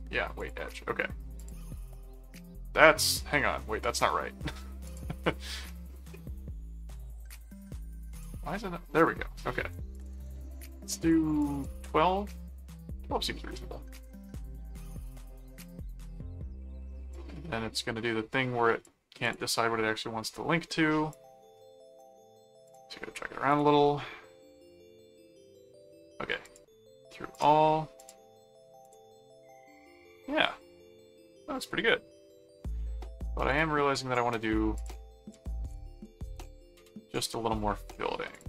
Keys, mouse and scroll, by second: 0.4 click, 1.4 click, 4.8 click, 8.1 click, 9.9-10.9 drag, 11.0 click, 13.9 click, 17.1-18.8 drag, 19.2 click, 21.1 click, 22.7 click, 23.5 click, 26.4 click, 27.3 click, 28.0 click, 28.8 click, 29.2-32.2 middle drag, 33.5 click, 34.8 click, 35.4-36.6 typing, 38.3 click.